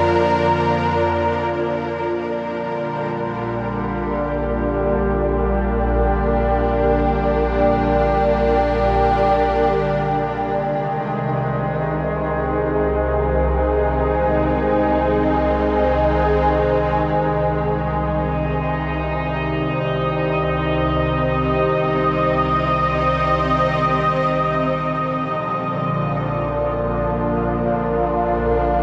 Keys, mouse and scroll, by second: 2.7-6.3 drag, 15.3 click, 19.8 click.